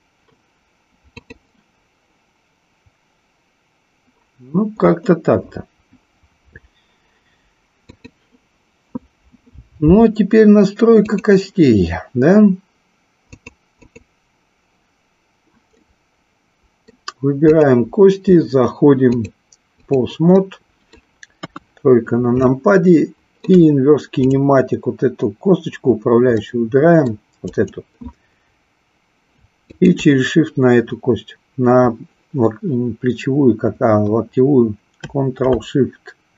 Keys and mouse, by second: 1.2 click, 7.9 click, 11.1 click, 13.2 click, 13.8 click, 15.7-17.0 middle drag, 17.4 click, 19.0-20.0 drag, 20.4 middle click, 21.4 KP_3, 22.6-23.4 shift+middle drag, 24.2 click, 26.3-27.2 middle drag, 27.5 click, 29.7-31.2 shift+drag.